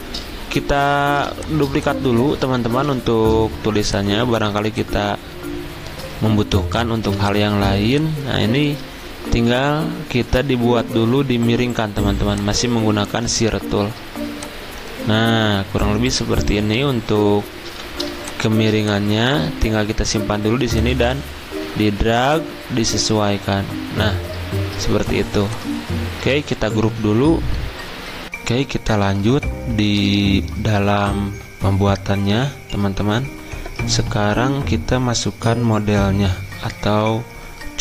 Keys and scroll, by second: 2.8 Delete, 17.7 typing, 27.2 ctrl+g.